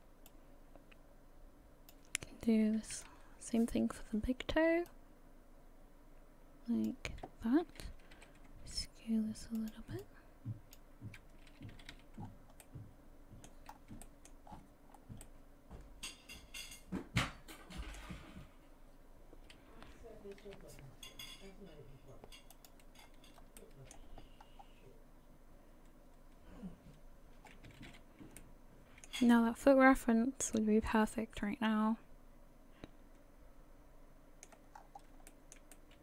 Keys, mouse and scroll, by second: 0.3 click, 2.8 KP_3, 4.9 click, 8.1 s, 10.0 click, 11.7 a, 11.9 a, 12.2-12.6 scroll down 4, 12.6 middle click, 13.7-14.0 scroll up 3, 14.0 shift+middle click, 14.5-15.0 scroll down 7, 15.2 middle click, 20.4 KP_3, 22.5 click, 23.0 scroll up 5, 23.6 shift+middle click, 24.4-25.6 scroll up 1, 27.7 a, 27.9 a, 28.4 middle click, 29.3 shift+middle click, 30.1 scroll down 2, 30.5 middle click, 32.4 middle click, 32.4 scroll down 1, 33.4 middle click, 34.8-35.1 scroll up 4, 35.3 shift+middle click, 35.5 shift+middle click, 35.7 middle click.